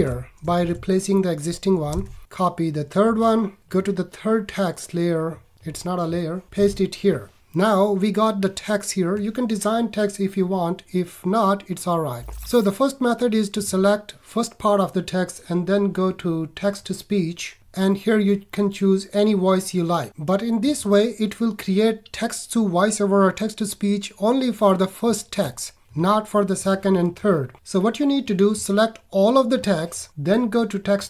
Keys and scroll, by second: 0.6 super+v, 1.9 super+Tab, 6.5 super+v.